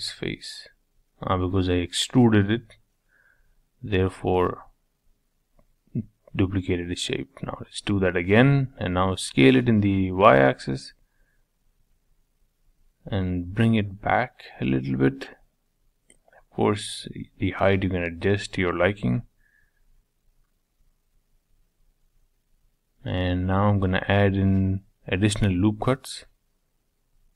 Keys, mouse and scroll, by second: 0.6 middle click, 1.6 ctrl+z, 1.9 ctrl+z, 2.9 ctrl+z, 4.0 e, 5.8 middle click, 6.7-7.1 scroll up 2, 7.1 scroll down 1, 7.3-10.0 shift+middle drag, 10.0 s, 12.4 middle click, 13.2-13.8 scroll down 6, 13.8-15.2 middle drag, 15.2 g, 17.0 g, 18.1 middle click, 18.9-19.7 scroll up 2, 19.7-21.2 middle drag, 21.2-21.9 scroll up 5, 21.9-23.8 middle drag, 23.8 ctrl+r, 27.1 middle click.